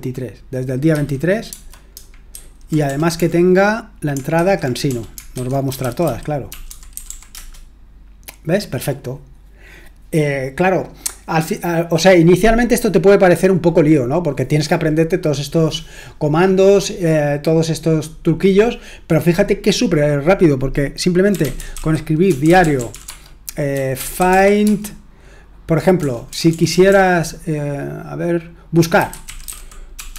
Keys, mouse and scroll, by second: 0.9-2.8 typing, 4.3-7.5 typing, 21.0-26.8 typing, 28.7-30.1 typing.